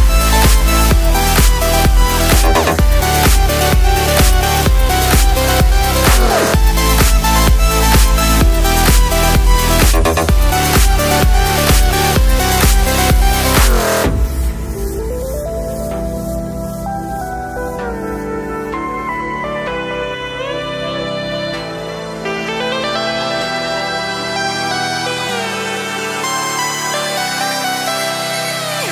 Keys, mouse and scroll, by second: 0.5 click, 1.3-4.8 drag, 6.9-8.5 drag, 9.1 click, 11.8-13.5 alt+shift+drag, 16.5-17.8 shift+drag, 18.7 shift+right click, 18.9-21.0 shift+drag.